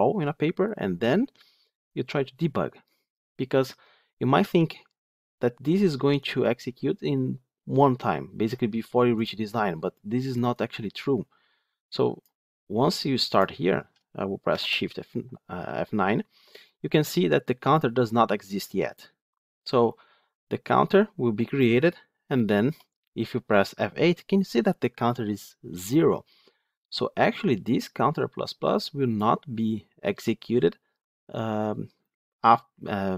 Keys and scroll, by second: 1.8 ctrl+F8, 13.3 ctrl+F8, 14.4 shift+F9, 22.6 F8, 24.8 F8.